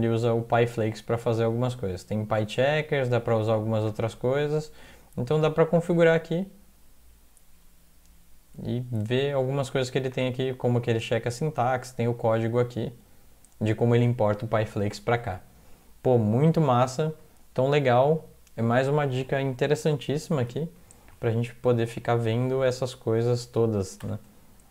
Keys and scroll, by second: 16.4 alt+Tab, 20.5 ctrl+\, 21.6 Down, 22.0 Down, 22.2 Down, 22.4 Down, 24.0 ±.